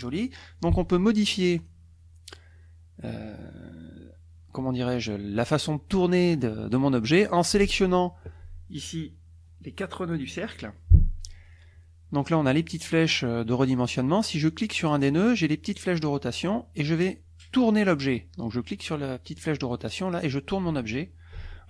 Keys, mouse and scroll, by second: 1.6 click, 7.4-9.0 drag, 14.9 click, 19.7-21.6 drag.